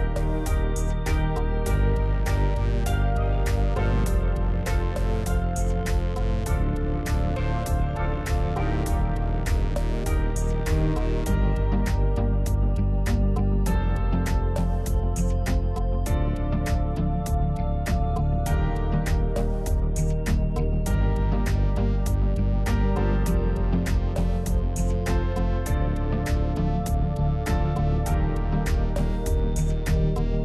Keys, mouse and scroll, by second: 1.5 s, 2.4 click, 2.8 g, 5.6 Tab, 6.1-6.9 scroll up 2, 7.6 alt+click, 8.2-11.2 middle drag, 11.2 ctrl+b, 15.0 Tab, 16.7-20.4 right drag, 20.4 click, 20.9-23.7 right drag, 23.7 drag, 24.9-25.9 drag, 25.9-26.4 scroll down 2, 27.0-28.1 drag, 28.9 click, 30.1 drag.